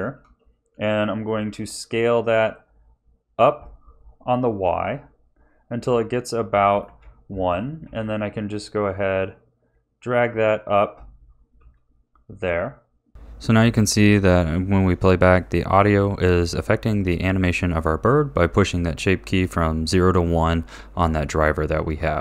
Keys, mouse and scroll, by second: 0.2 s, 7.8 g, 13.2 click, 13.2 a.